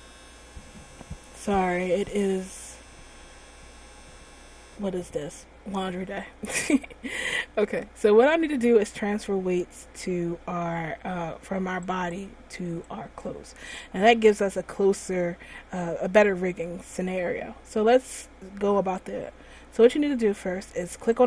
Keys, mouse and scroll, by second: 7.7-10.8 scroll up 1, 11.1 scroll down 1, 12.1 right click, 13.3 right click.